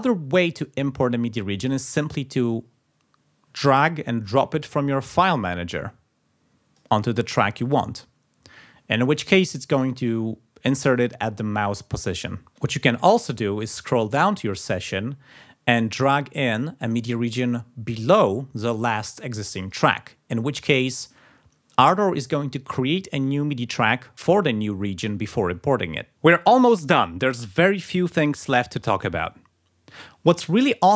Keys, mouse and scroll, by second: 4.2-7.0 drag, 12.6 scroll down 2, 13.4-13.8 scroll down 2, 13.9 scroll up 2, 16.3-19.9 drag.